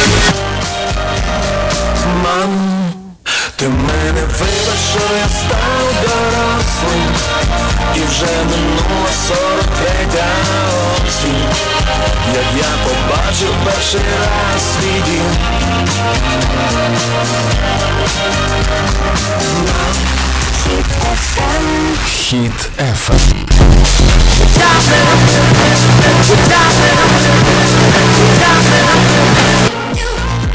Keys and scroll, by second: 0.5 Page_Down, 29.6 Page_Down.